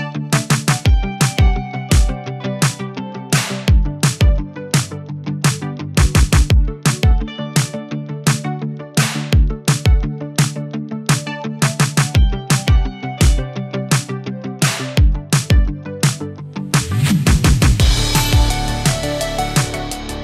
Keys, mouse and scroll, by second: 0.1 space, 0.6-1.2 click, 9.3-10.6 drag, 18.6 click.